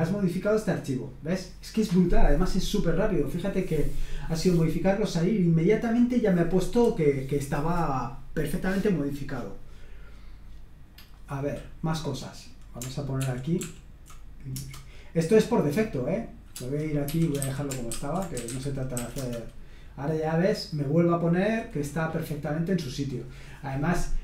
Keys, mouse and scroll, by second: 11.0 click, 13.2 ctrl+p, 13.6 ctrl+p, 14.5 Return, 16.9-19.4 typing.